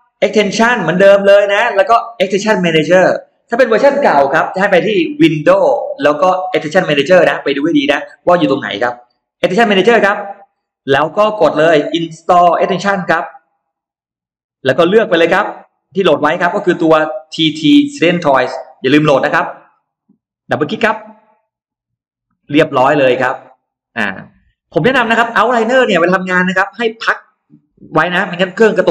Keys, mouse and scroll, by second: 0.1 click, 9.9 click, 13.2 click, 15.5 click, 20.5 click, 20.7 click, 24.3 click, 27.6 click.